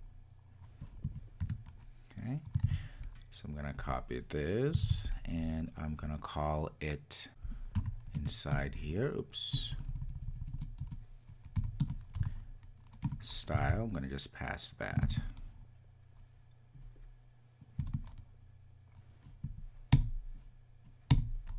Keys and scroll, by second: 2.8 super+s, 5.1 super+c, 8.3 Return, 13.1 Return, 13.8 super+v.